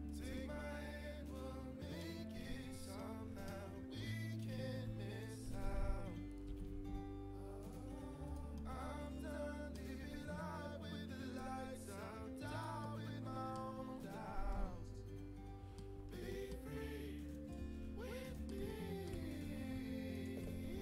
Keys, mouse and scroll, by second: 0.3-1.7 middle drag, 2.9-5.0 drag, 4.2 middle click, 4.2-7.2 right drag, 7.2 g, 8.5-10.6 middle drag, 10.6-13.9 drag, 12.7 middle click, 13.9-15.6 middle drag, 15.9 middle click, 17.5-19.1 right drag, 19.1 middle click, 20.6 right click.